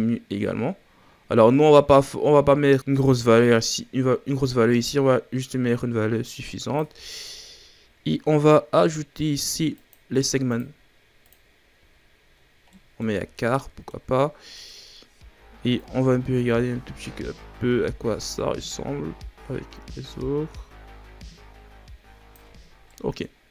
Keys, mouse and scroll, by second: 7.1-9.7 scroll up 4, 9.7-12.3 drag, 12.3-12.7 scroll down 2, 12.7 middle click, 13.0 a, 13.5-13.9 middle drag, 13.9-14.5 scroll up 5, 14.5-15.7 middle drag, 15.7-18.8 drag, 22.6 scroll down 3, 22.8 middle click.